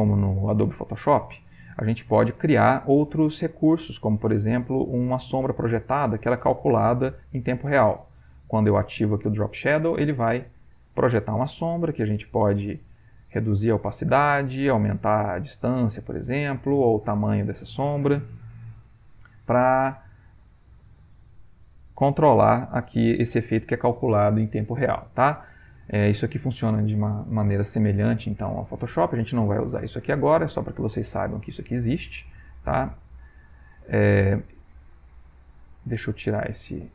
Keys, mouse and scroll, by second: 3.1-4.1 drag, 5.0 click, 6.6 click, 13.0 click, 14.8 click, 16.7-17.9 drag, 21.8 click, 28.9 click, 30.1 click, 32.5 click, 32.9 click, 35.2-36.6 right drag.